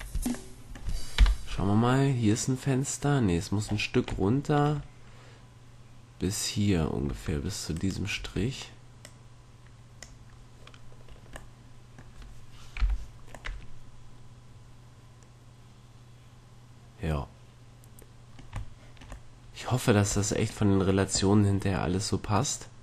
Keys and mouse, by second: 0.0 Tab, 1.3 KP_1, 3.8 middle click, 4.6-7.2 middle drag, 7.2 Tab, 7.9 right click, 8.3 Tab, 12.9 KP_5, 15.4 middle click, 18.9-22.8 middle drag.